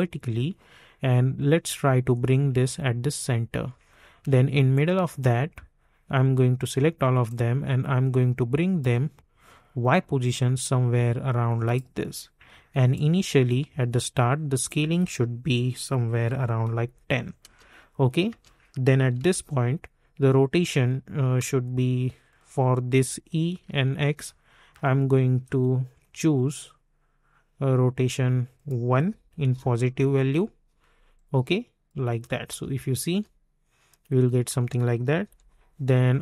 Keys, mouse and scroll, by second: 15.8 1, 16.6 Return, 17.4 space, 19.1 k, 20.4 click, 21.3 ctrl+z, 22.2 click, 24.7-25.4 scroll up 1, 25.4 scroll down 1, 28.5 click, 28.9 1, 29.4 Return, 31.1-33.1 drag, 33.1 space, 35.2 j.